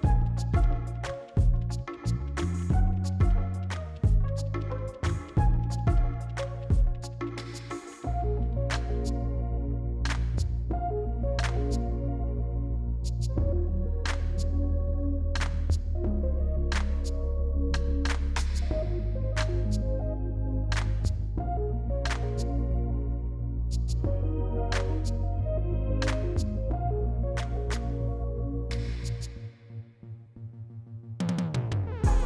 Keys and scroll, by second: 1.7 s, 5.8 ctrl+z, 7.0 z, 9.4 s, 11.5 s, 13.4 z, 17.7 c, 18.3 q, 20.3 e, 22.3 c, 23.1 q, 24.1 s, 25.3 s, 28.7 s.